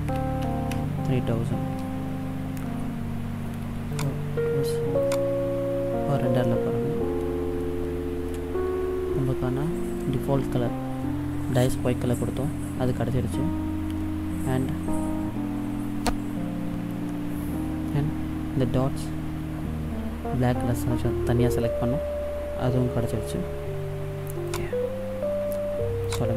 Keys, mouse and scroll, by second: 0.6 KP_0, 4.1 click, 6.6-7.0 scroll up 2, 7.9 shift+middle click, 9.2-9.8 scroll up 1, 24.6 click.